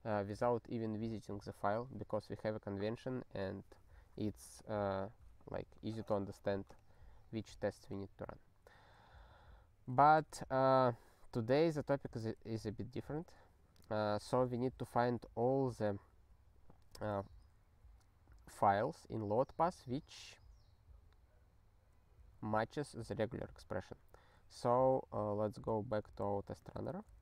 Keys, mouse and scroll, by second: 10.2 super+b, 12.2 ctrl+g, 13.2 Return, 22.6 super+b.